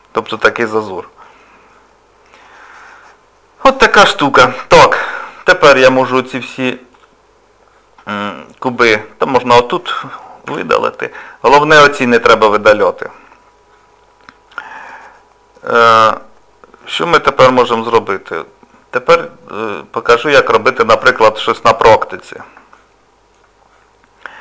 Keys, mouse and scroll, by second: 0.0 scroll down 2, 0.6 middle click, 0.6 scroll down 1, 6.9 click, 8.9 click, 10.5 Delete, 17.1 click, 20.3 click, 21.1 scroll down 1, 21.6 middle click, 22.8 shift+middle click, 23.3-24.2 scroll down 1.